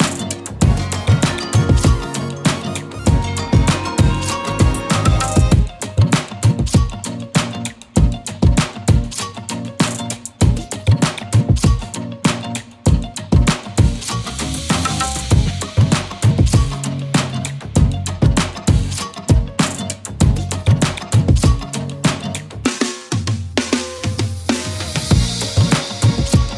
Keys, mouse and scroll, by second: 2.2 scroll up 1, 2.6-6.4 typing, 3.0 click, 4.0 click, 4.4-5.3 click, 5.0 click, 5.4-6.0 click, 11.3 typing, 12.3 ctrl+2, 12.6 shift+click, 14.3 ctrl+z, 15.2 click, 17.7 shift+click, 20.2-21.8 alt+shift+click, 22.4 z, 22.7 click, 22.9-23.3 z, 24.0 click, 25.5-26.5 alt+shift+click.